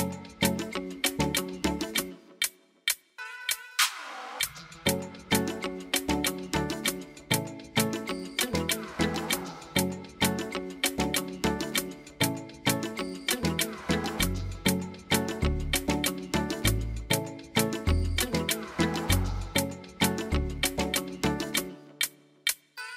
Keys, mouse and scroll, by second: 0.1 middle click, 1.9 click, 2.8 middle click, 3.1 middle click, 7.7 click, 10.0 click, 13.9-15.5 scroll down 2, 15.5 click, 16.4 click, 17.3 click, 17.9-18.7 scroll down 2, 19.0 click.